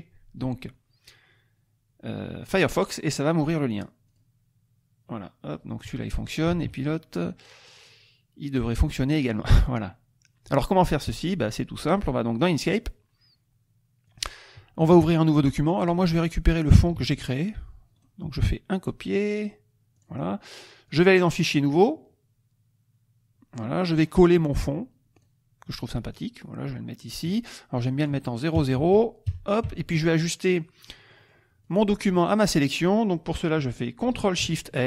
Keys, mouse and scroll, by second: 4.0 click, 6.5 alt+Tab, 7.7 click, 12.4 click, 14.1 click, 14.8 KP_Subtract, 15.8 click, 16.2 click, 16.9 ctrl+z, 17.9 click, 20.0 click, 20.8 click, 21.7 click, 23.9 right click, 25.2 click, 26.1-27.4 drag, 27.8 click, 28.5 KP_0, 28.8 Tab, 29.2 KP_0, 29.6 Tab, 30.8 click, 31.6 click, 32.3 click.